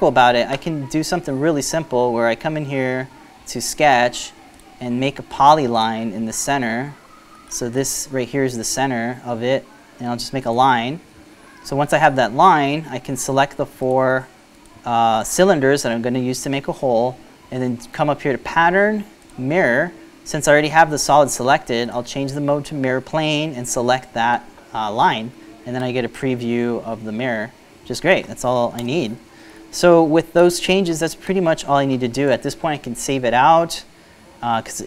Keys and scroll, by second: 11.5 Escape, 30.3 Return.